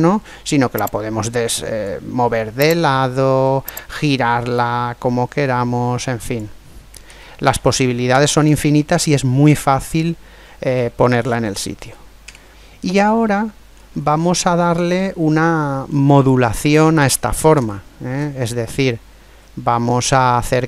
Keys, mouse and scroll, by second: 0.8-2.5 drag, 2.6 right click, 3.7 click, 5.4 click, 7.1 ctrl+z, 7.5 ctrl+z, 8.1 ctrl+z, 8.7-10.5 middle drag, 12.3 Tab, 12.5-13.5 middle drag, 13.7-14.4 scroll up 1, 14.4-16.2 middle drag, 17.4-20.1 middle drag.